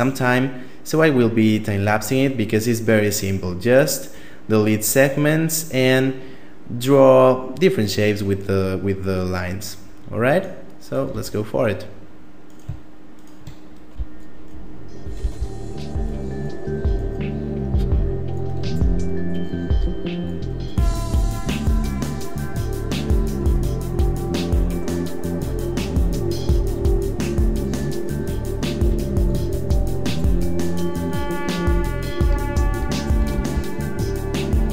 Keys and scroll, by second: 10.9 Tab, 13.8 x, 15.2 ., 15.4 s, 19.7 e, 21.4 e, 23.6 e, 26.6 Tab, 26.8 a, 27.7 Tab, 29.1 x, 29.4 e, 30.9 Tab, 31.5 Tab, 32.2-33.5 typing.